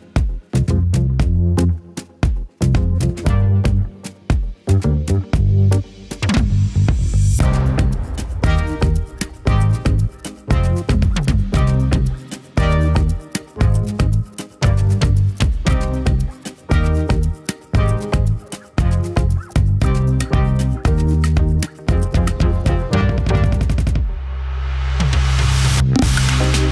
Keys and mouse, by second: 23.9 right click, 24.1 e, 24.4 click, 24.5 ctrl+p, 24.5 ctrl+z, 24.7 click, 25.1 g, 25.3 r, 25.5 g, 25.7 KP_3, 26.1 middle click, 26.3 click.